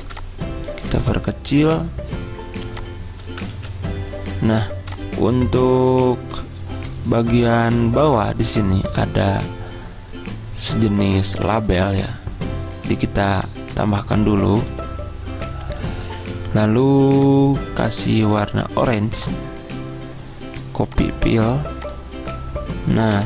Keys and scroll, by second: 3.6 ctrl+z.